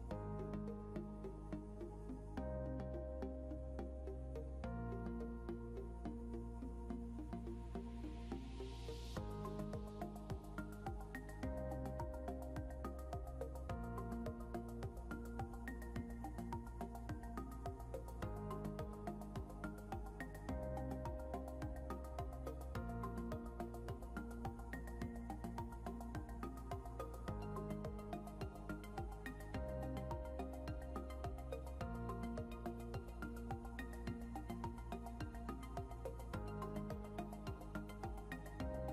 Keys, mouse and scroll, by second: 0.2 scroll up 1, 1.8 scroll up 1, 3.4 scroll down 1, 7.3 scroll up 1, 16.5 scroll down 1, 21.2 scroll up 1, 24.5 Down, 24.8 Down, 27.0 Down, 28.1 Down, 31.1 ctrl+click, 31.5 ctrl+scroll up 2, 36.5 scroll down 1.